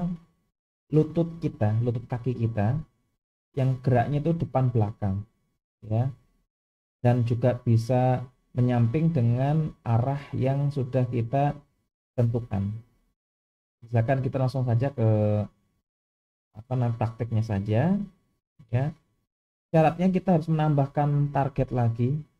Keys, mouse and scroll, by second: 17.9 KP_1, 22.1-22.3 shift+middle drag.